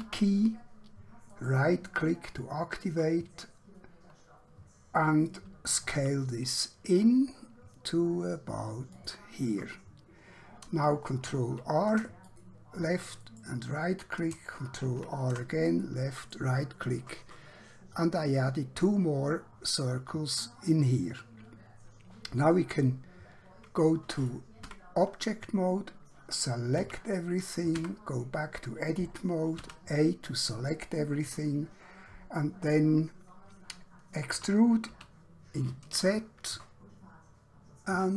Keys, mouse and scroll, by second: 0.0 e, 1.4 right click, 6.0 s, 9.0 click, 11.4 ctrl+r, 12.3 click, 13.3 right click, 14.9 ctrl+r, 15.8 click, 16.3 right click, 17.9 click, 22.5 middle click, 24.8 Tab, 26.9 a, 27.8 Tab, 29.6 a, 34.3 e, 34.9 z.